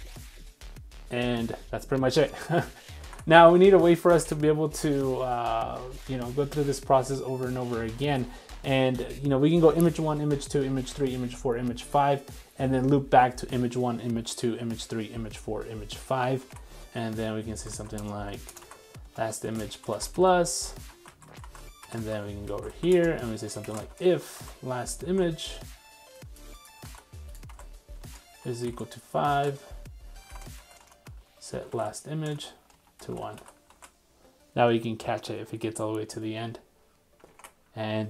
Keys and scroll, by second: 3.0 super+Tab, 4.0 super+Tab, 16.4 super+Tab, 16.9 super+v, 21.4 super+x, 24.5 super+v, 25.1 super+z, 27.0 super+c, 27.6 super+v, 33.7 super+s, 37.3 super+Tab.